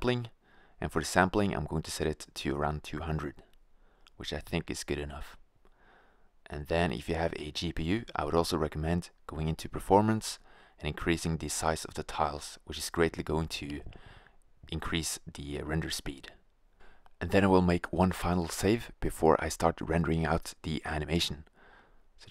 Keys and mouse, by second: 1.3-4.3 drag, 3.8 0, 6.2-6.6 drag, 8.1-9.8 middle drag, 9.8-11.6 drag, 11.6 middle click, 11.8-13.7 drag, 15.3 0, 21.4-22.3 drag.